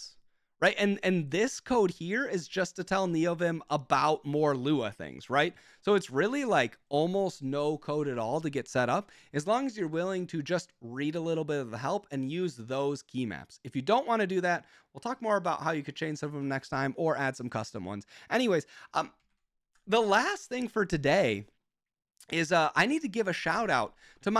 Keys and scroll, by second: 19.4 super+j, 23.6 ctrl+Tab.